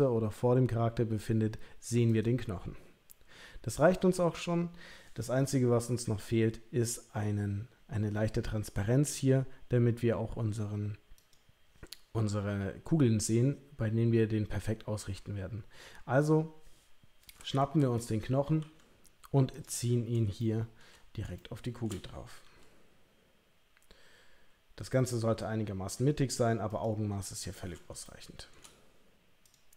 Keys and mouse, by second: 11.2 click, 15.1 Tab, 15.9 Tab, 18.0 click, 18.6 g, 20.4 shift+middle click, 20.5 shift+click, 21.3 shift+middle click, 22.4 g, 28.0 shift+middle click, 29.4 click.